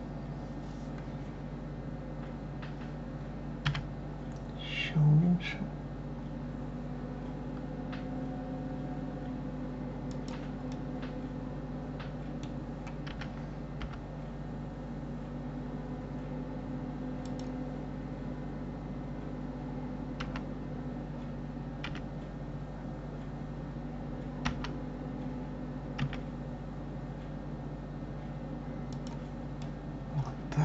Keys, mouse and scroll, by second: 3.6 s, 10.7-13.1 middle drag, 13.1 s, 29.6-30.6 middle drag.